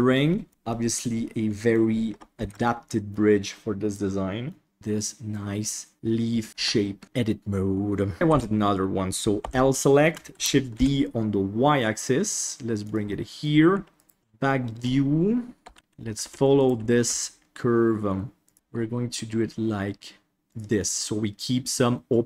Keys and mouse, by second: 0.8-1.8 middle drag, 2.4 ctrl+s, 2.7 middle click, 3.9 middle click, 4.7 Tab, 5.5-6.6 middle drag, 6.8 shift+middle click, 7.4 middle click, 8.3 alt+a, 9.4 l, 10.3 shift+d, 13.1 middle click, 13.9 right click, 14.2 ctrl+KP_1, 15.6 g, 16.5 right click, 17.0 g, 18.5 ctrl+KP_1, 18.5 g, 20.8-22.2 middle drag.